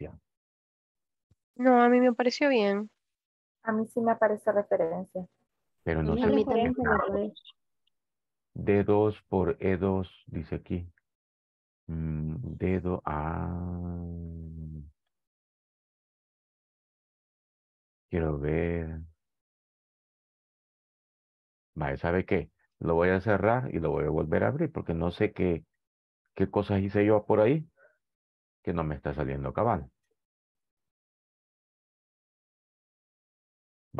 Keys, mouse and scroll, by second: 18.4-20.4 drag, 21.4 click.